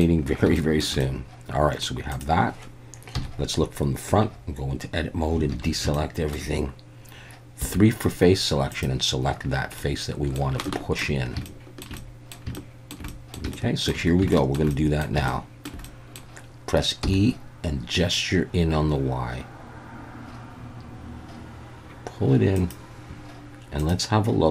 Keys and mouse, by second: 0.6 shift+middle drag, 1.0-1.8 middle drag, 2.1 click, 3.1 KP_1, 4.1 Tab, 5.5 alt+a, 5.9 shift+middle click, 7.6 3, 8.7 click, 9.8 middle click, 10.6 shift+middle click, 11.4 shift+middle click, 12.0 middle click, 12.5 shift+middle click, 13.1 middle click, 13.5 shift+middle click, 14.3 shift+middle click, 14.7 middle click, 15.3 shift+middle click, 15.8 middle click, 17.0 e, 22.6 click.